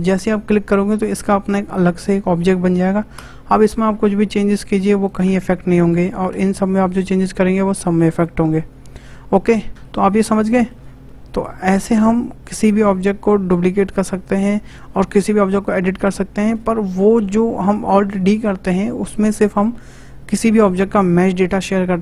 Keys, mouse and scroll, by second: 3.1 Tab, 3.6 click, 4.4 click, 5.4 Tab, 5.9 click, 6.3 Tab, 6.9 click, 7.4 click, 8.5 Tab, 9.7-13.6 shift+middle drag.